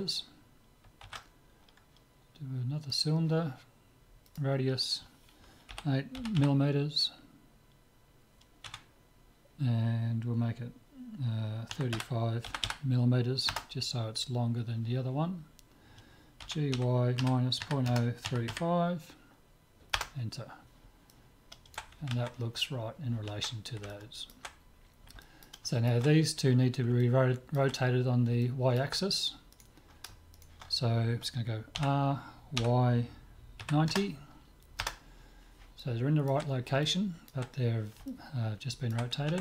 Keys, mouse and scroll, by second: 1.0 shift+a, 4.3-6.0 drag, 6.4 m, 12.7 m, 16.5 g, 21.1-22.3 middle drag, 23.9-29.5 middle drag, 29.5 click, 29.5-32.2 right drag, 31.8 r, 35.8-39.4 middle drag.